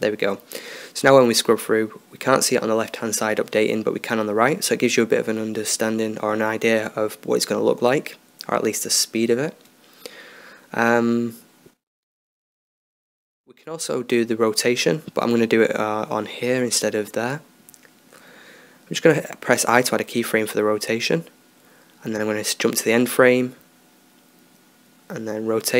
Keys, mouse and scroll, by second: 1.4-3.2 drag, 5.4 click, 5.8-7.2 drag, 10.6-13.7 drag, 17.5 i, 21.8 i, 24.8-25.7 drag.